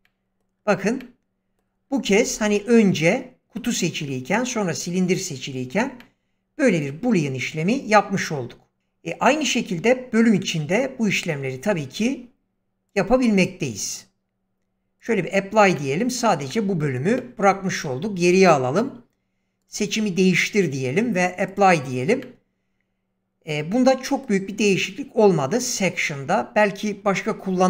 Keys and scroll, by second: 11.7 ctrl+z, 17.6 ctrl+z.